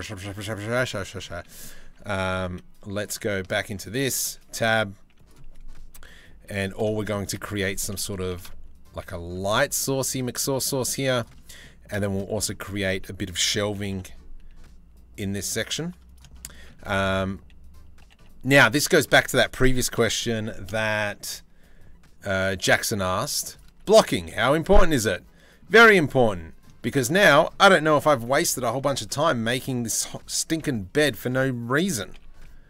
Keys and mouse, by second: 0.2 Tab, 0.6 click, 1.1 click, 1.4 s, 2.0 z, 3.1 Tab, 3.7 Tab, 4.0 a, 4.2 s, 5.5 KP_3, 6.0 KP_1, 7.4 r, 9.0 g, 10.5 z, 11.5 shift+middle click, 13.3 g, 15.8 shift+middle click, 16.1 click, 16.4 2, 16.6 click, 17.6 g, 19.5 ctrl+l, 19.9 g, 23.3 z, 23.9 z, 24.4 click, 25.8 click, 27.6 KP_3, 28.0 KP_1, 28.5 z, 30.2 KP_3, 31.4 e.